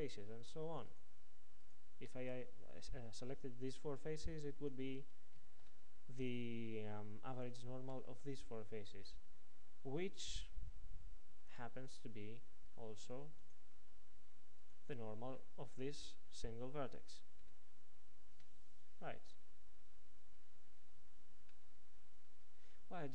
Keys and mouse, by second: 11.4 ctrl+Tab, 21.6-23.1 middle drag.